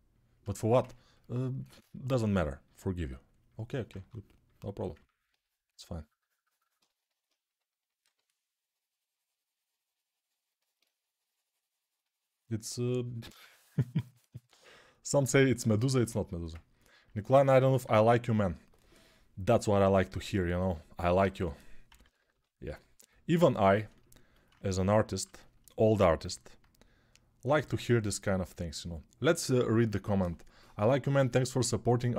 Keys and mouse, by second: 7.8 6, 15.7 alt+click, 16.0 alt+shift+click, 16.1-17.6 ctrl+alt+right drag, 21.2 g, 21.8 ], 21.9 ], 22.1 ], 24.2-32.1 shift+drag.